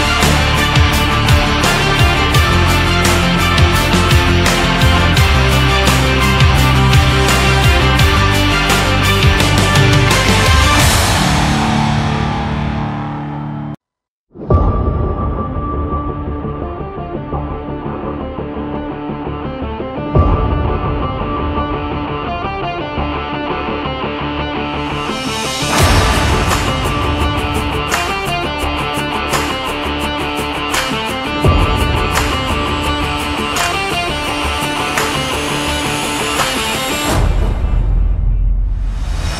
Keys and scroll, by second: 6.5 Right, 21.8 ctrl+c, 22.1 ctrl+f.